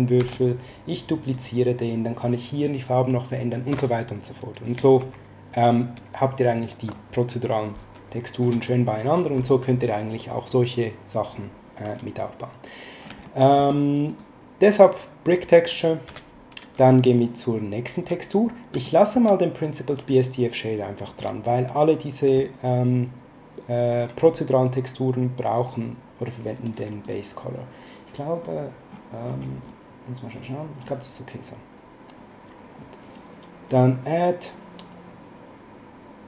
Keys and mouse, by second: 0.2 shift+d, 5.0 ctrl+z, 13.2 middle click, 14.1 click, 16.0 x, 18.8 shift+middle click, 21.5 middle click, 27.0 click, 33.7 click.